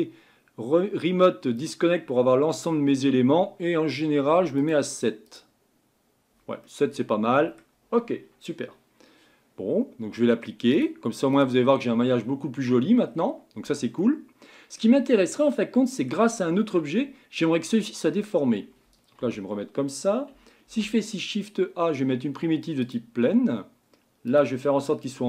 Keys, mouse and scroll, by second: 1.6-6.6 drag, 6.6-9.6 middle drag, 10.7-11.9 drag, 11.9 Tab, 12.2-13.0 scroll up 4, 13.0-13.6 scroll down 4, 13.6 Tab, 14.0-15.0 middle drag, 15.0-15.5 scroll down 2, 15.5-19.2 middle drag, 19.2 KP_1, 20.6 shift+a, 24.3-25.2 drag.